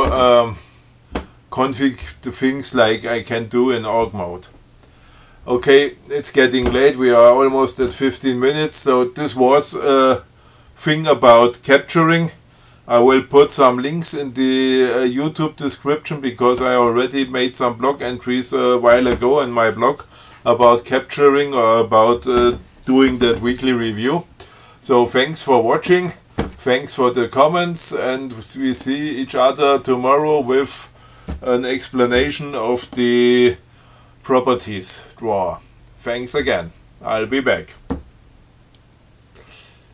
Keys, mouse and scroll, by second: 39.0 click.